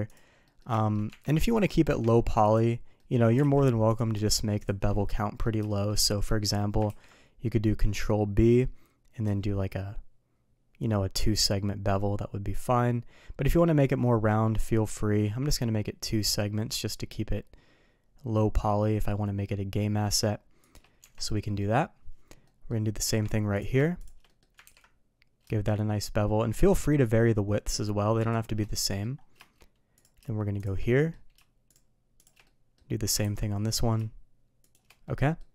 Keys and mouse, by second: 0.1 click, 0.4 middle click, 0.7 shift+middle drag, 1.1 Tab, 2.5 click, 2.9 middle click, 3.4 alt+a, 3.8 click, 4.9-5.4 middle drag, 5.6 shift+middle drag, 6.0 middle click, 6.8 ctrl+b, 21.0 Tab, 21.3 middle drag, 22.4 middle drag, 23.0 Tab, 23.9 shift+click, 24.2 middle click, 24.6 ctrl+b, 28.6-29.0 middle drag, 30.8 middle drag, 31.6 shift+drag, 32.2 shift+click, 32.4 middle click, 33.2 ctrl+b, 35.0-35.3 middle drag.